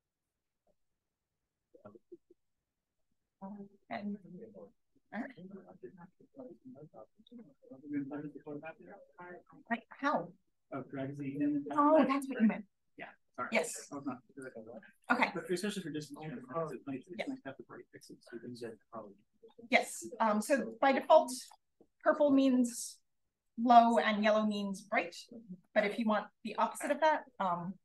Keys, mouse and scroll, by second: 0.6 click, 12.9 click, 14.0 click, 17.9-20.0 drag, 20.6 click, 22.2 click, 26.4 click, 27.2-27.8 scroll up 1.